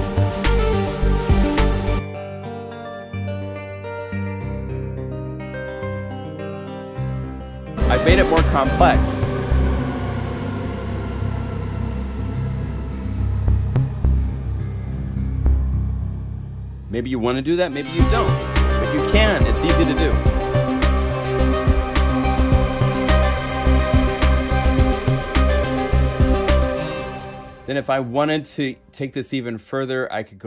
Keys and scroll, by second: 26.8 space.